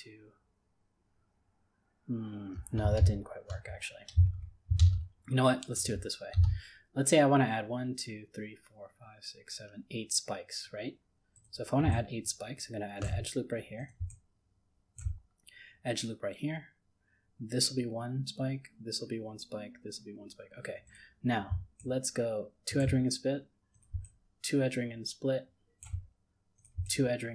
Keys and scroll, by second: 3.0 ctrl+z.